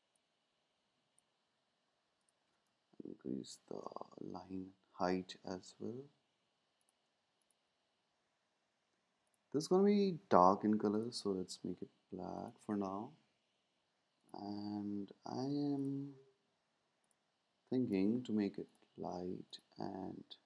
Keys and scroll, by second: 3.8 Down, 4.0 Down, 4.1 Down, 5.0 Down.